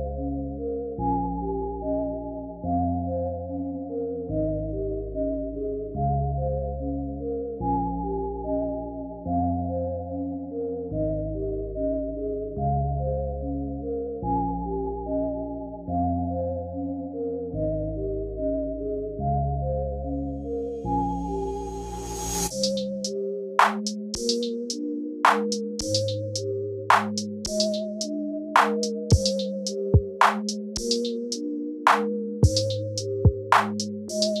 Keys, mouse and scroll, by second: 5.9 click, 5.9 i, 10.4 click, 11.5 x, 13.1 click, 15.6 click, 23.7 click, 33.1 click, 34.0 click.